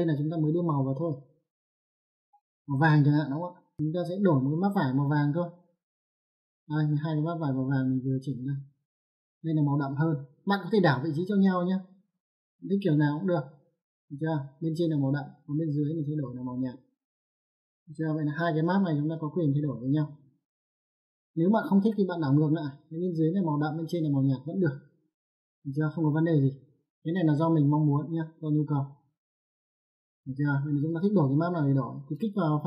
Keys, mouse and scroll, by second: 1.7 click, 2.8 click, 9.8 click, 12.6 click, 16.6 click, 19.4 middle click, 21.5 click, 23.0 click, 24.8 click, 26.7 click, 27.9 click, 29.1 click, 30.6 click, 31.7 middle click.